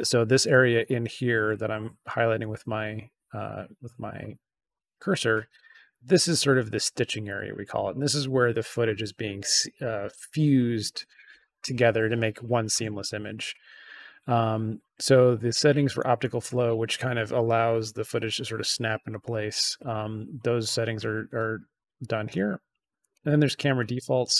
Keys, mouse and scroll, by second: 21.9-23.0 drag.